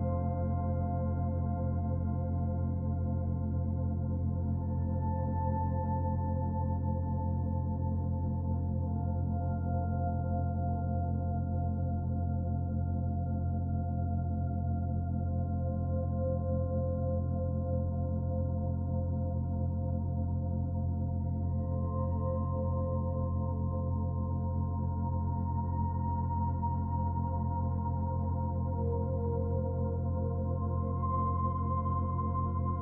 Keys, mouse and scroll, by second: 2.8-3.3 scroll up 1, 3.3 middle click, 5.4 click, 6.8 click, 11.9 click, 16.7 click, 22.0 shift+middle click, 23.4 click, 24.3 middle click, 25.8 click, 26.9 Tab, 27.3 middle click, 28.7 ctrl+r.